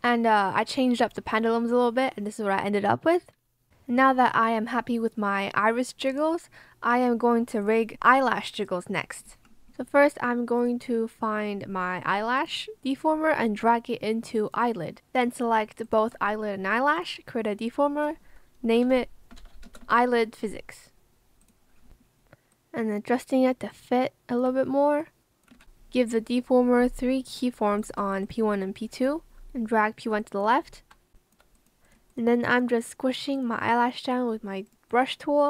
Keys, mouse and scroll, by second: 16.4 shift+click, 18.4-20.3 typing, 22.5 ctrl+click, 23.6 ctrl+alt+click, 23.7 ctrl+alt+shift+click, 23.9 ctrl+alt+shift+click, 24.9 ctrl+click, 25.5 ctrl+z, 30.1 b, 31.0 ctrl+scroll, 31.1 click.